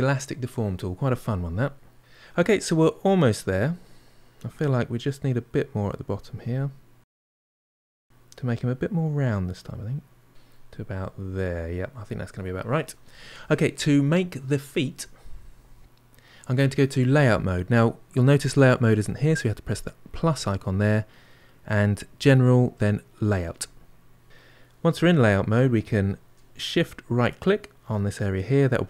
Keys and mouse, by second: 5.8-7.1 drag, 7.1-8.5 middle drag, 8.5-9.6 drag, 10.2-13.0 middle drag, 20.0 click, 24.2-27.7 middle drag, 27.7-28.8 shift+right drag.